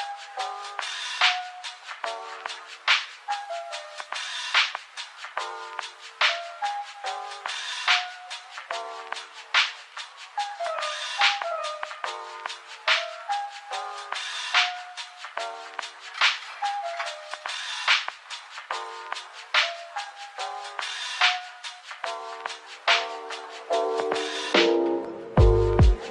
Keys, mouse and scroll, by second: 0.1-2.8 typing, 1.5-2.2 scroll down 1, 4.3 typing, 15.5 typing, 16.0 scroll up 1, 16.5-16.8 scroll down 1, 16.8 middle click, 17.4 Tab, 18.1 ctrl+r, 24.9 typing, 25.8 Tab.